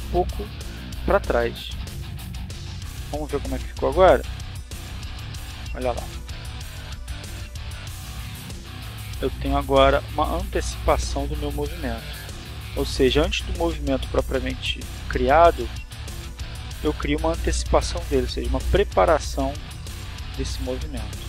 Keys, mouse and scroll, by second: 1.9 click, 2.7 click, 3.7-4.7 drag, 5.4 click, 6.1 click, 6.8 click, 7.1 click, 10.4 click, 11.7 click, 12.6 click, 13.3 click, 15.5 click, 16.2 click, 16.8-18.1 drag, 18.8 click, 19.3 click, 20.2-21.2 drag.